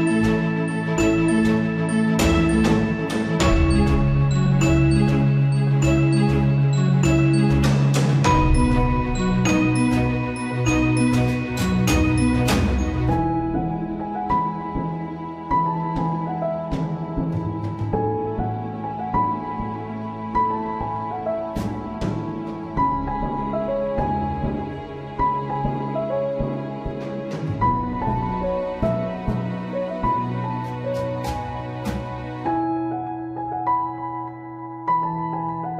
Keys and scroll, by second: 10.6 ctrl+z, 13.4 ctrl+s, 28.7 Return, 30.0 BackSpace, 30.3 Return, 31.1 ctrl+z.